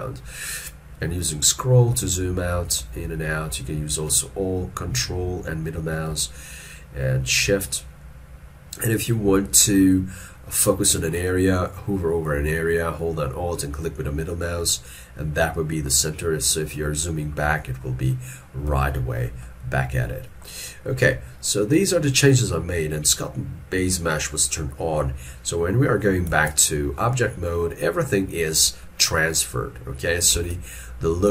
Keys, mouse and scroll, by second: 2.0 scroll up 1, 2.0 shift+middle click, 2.8 ctrl+middle click, 5.1 ctrl+middle click, 6.5 shift+middle click, 7.7 middle click, 13.2 middle click, 15.4 scroll up 1, 16.3 scroll down 1, 16.7 scroll up 1, 17.6 scroll down 1, 18.8 shift+middle click, 19.5 scroll down 1, 26.4 ctrl+Tab.